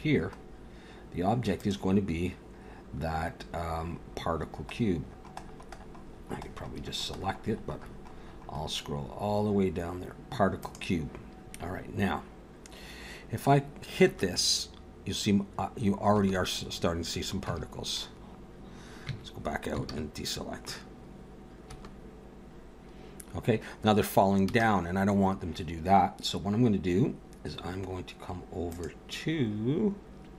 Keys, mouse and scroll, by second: 0.4 scroll down 1, 1.6 click, 14.1 space, 16.1 space, 17.5 Tab, 19.1 Tab, 19.8 alt+a, 21.2 scroll up 1, 21.6 space, 24.4 space, 28.7 click.